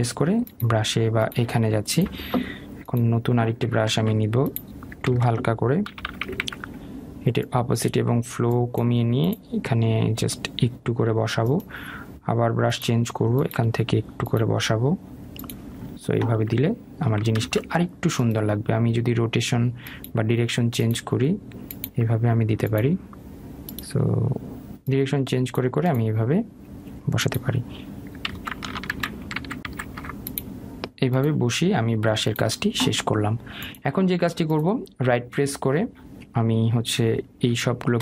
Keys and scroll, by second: 4.4 ctrl+alt+z, 5.6 ctrl+z, 17.9 ctrl+z, 28.8 ctrl+z, 29.4 ctrl+alt+z.